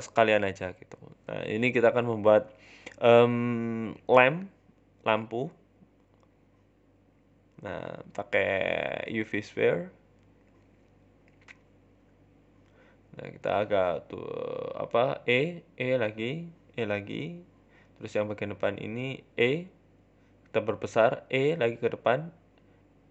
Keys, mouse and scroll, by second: 1.1 shift+middle click, 1.5 click, 1.9-2.2 scroll, 2.2 scroll up 3, 2.2 e, 2.4 s, 3.5 e, 4.3 scroll down 3, 4.5 shift+middle click, 4.6 e, 5.3 shift+middle click, 5.3-5.9 scroll up 4, 5.5 shift+middle click, 6.2 shift+a, 9.7 scroll up 7, 9.7 r, 9.9 shift+middle click, 10.2 s, 11.3 right click, 11.8 g, 13.4 e, 13.8 s, 14.9 e, 15.4 s, 16.2 e, 16.5 s, 17.5 shift+middle click, 17.9 right click, 18.3 w, 19.3 e, 19.5 s, 20.5 e, 21.8 shift+middle click, 22.3 middle click, 22.6-23.1 typing.